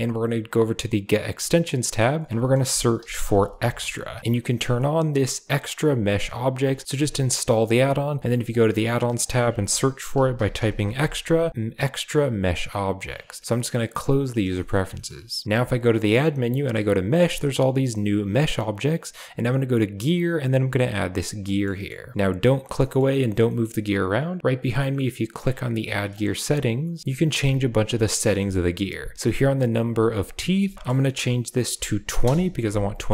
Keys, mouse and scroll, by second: 14.5 shift+middle click, 14.9 shift+middle click, 15.5 shift+a, 21.5 click, 21.7 shift+middle click, 22.1 shift+middle click, 22.7 middle click, 23.4 shift+middle click, 24.5 click, 26.1 click, 28.1 middle click, 28.3 shift+middle click, 30.2-32.2 drag, 33.0 click.